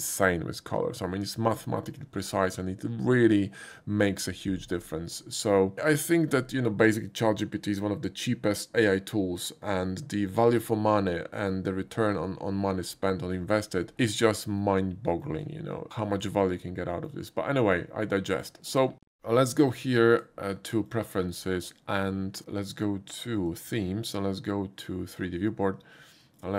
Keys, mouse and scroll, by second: 14.6-15.2 shift+middle drag, 16.5 shift+middle click, 19.4 click, 20.1 click, 20.9-21.3 drag, 23.4 click, 25.1 click, 26.3 click.